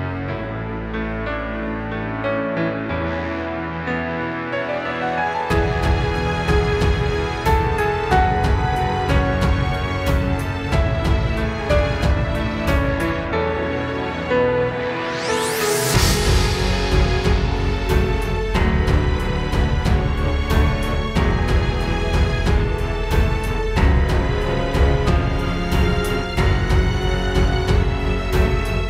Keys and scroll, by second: 0.5 space, 3.3 space, 3.8 space, 4.5 space, 5.4 space, 6.4 super+space, 7.3 space, 8.7 space, 9.0 space, 10.1 space, 21.0 space, 22.0 space, 22.7 space, 23.0 space, 23.6 super+space.